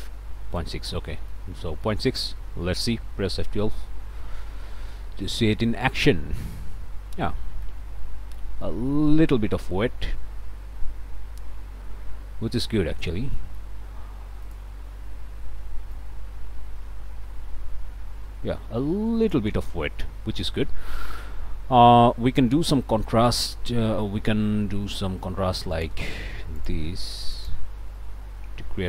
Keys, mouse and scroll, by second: 1.1 click, 1.5 scroll down 1, 1.8 click, 3.6 F12, 6.7 scroll up 1, 7.2 click, 8.0 click, 8.6 shift+click, 9.1 shift+scroll up 1, 9.5-13.8 drag, 14.4 click, 15.9-19.5 drag, 19.9 scroll up 1, 26.6 click, 27.3 click.